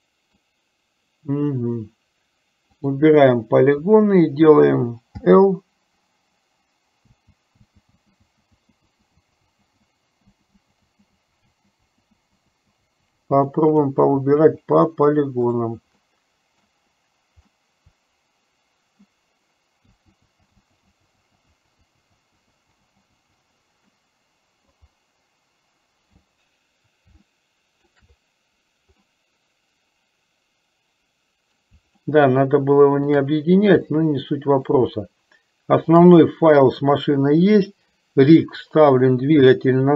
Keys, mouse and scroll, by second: 0.0 middle click, 3.0 click, 5.3 l, 8.9 l, 9.5 l, 10.3 l, 11.0 l, 12.2 l, 13.4 l, 14.9 l, 17.0 right click, 17.6-19.5 middle drag, 20.1-23.5 typing, 24.2 middle click, 27.3 shift+middle click, 29.1-31.9 middle drag, 32.2-33.5 shift+middle drag, 34.1 middle click, 35.3 shift+middle click.